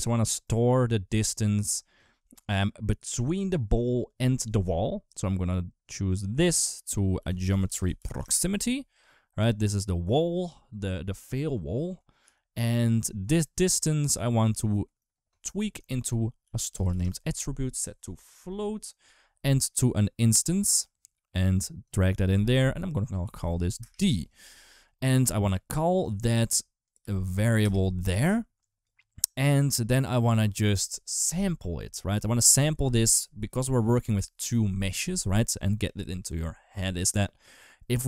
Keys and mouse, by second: 5.7-8.7 drag, 12.0 g, 15.7 shift+a, 18.0-19.0 drag, 19.5 click, 21.6 click, 22.9 click, 24.1 click, 24.3 click, 25.6 click, 25.9 shift+d, 26.6 click, 28.6 click, 29.7-32.4 drag.